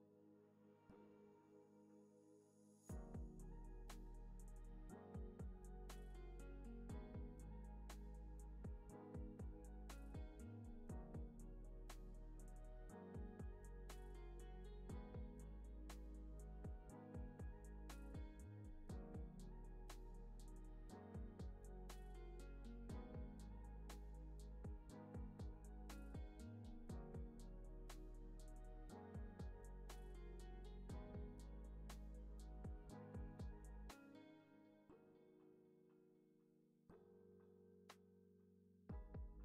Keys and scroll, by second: 18.5 super+c, 18.7 super+v.